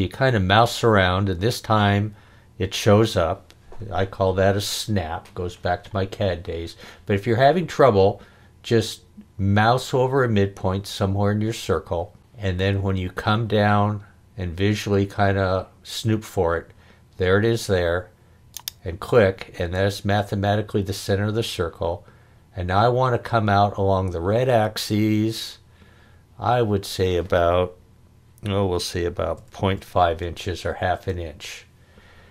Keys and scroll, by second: 29.3 ., 29.7 5, 30.9 Return.